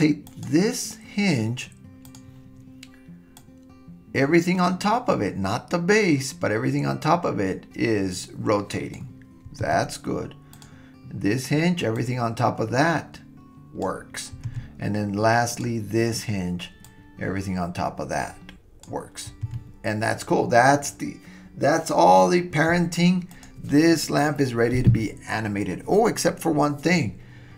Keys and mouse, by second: 2.1 drag, 3.5-4.6 drag, 4.8-6.1 drag, 6.3 click, 9.7 super+z, 10.6 click, 12.0-13.8 drag, 14.5 super+z, 16.9-18.8 drag, 19.5 super+z, 23.3 click.